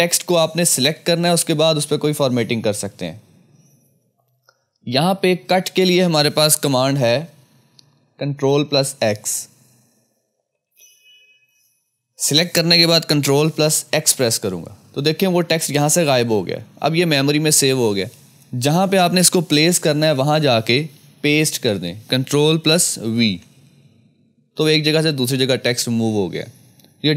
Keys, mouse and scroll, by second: 6.7 F2, 10.5 F1, 11.5 click, 14.1 ctrl+x, 19.6 Return, 22.6 ctrl+Return, 23.2 ctrl+v.